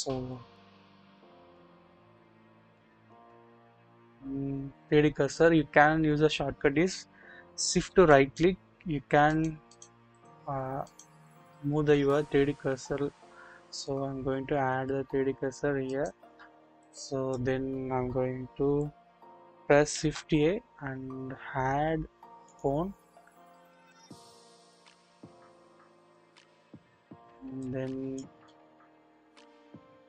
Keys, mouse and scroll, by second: 0.8 KP_1, 1.2-1.5 scroll up 1, 2.5 1, 2.8-3.1 shift+middle drag, 8.0 shift+right click, 9.3 shift+right click, 10.8 shift+right click, 15.8 shift+right click, 16.8 click, 20.0 shift+a, 23.6 scroll up 1, 24.5 click, 25.4 click, 27.6 click.